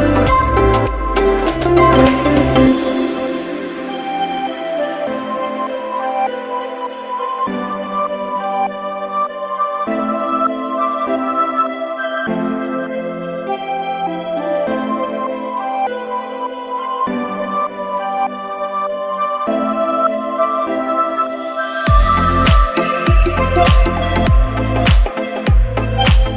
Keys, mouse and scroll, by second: 0.6 click, 1.3 scroll up 2, 1.8 click, 2.2 scroll down 1, 2.9 click, 3.4 scroll up 2, 4.5 right click, 7.0 right click, 10.9 click, 11.9-18.4 right click, 20.8 right click, 22.0 right click, 23.6-24.2 scroll down 5, 25.2 click.